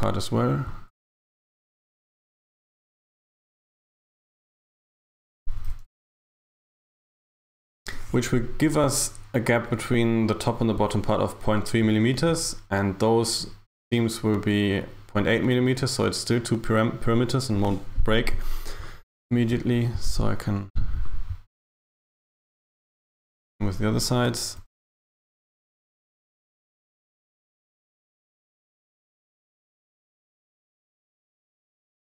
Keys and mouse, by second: 0.8 right click, 3.4 shift+right click, 4.5 shift+right click, 5.2 g, 18.8 right click, 21.0 shift+right click, 22.7 shift+right click, 24.6 g, 31.2 right click.